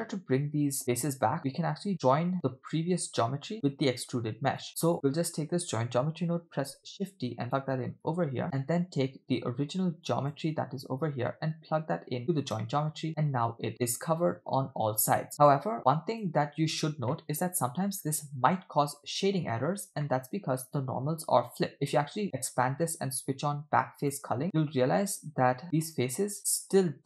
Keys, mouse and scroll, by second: 1.3 scroll down 2, 2.0 click, 2.3 middle click, 4.0 click, 4.7 middle click, 6.6 shift+d, 8.0 click, 8.4 middle click, 10.1 click, 11.3-12.6 drag, 13.2-14.8 middle drag, 15.8 click, 17.1-19.4 middle drag, 20.1 middle click, 21.7-24.4 drag, 25.5 scroll up 1, 25.6 scroll down 2, 25.7 middle click, 26.4-26.7 scroll up 1, 26.7 scroll down 1.